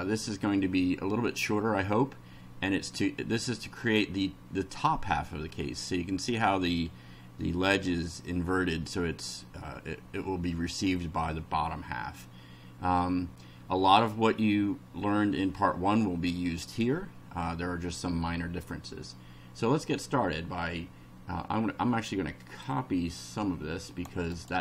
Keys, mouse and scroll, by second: 22.7-24.2 drag, 24.3 right click.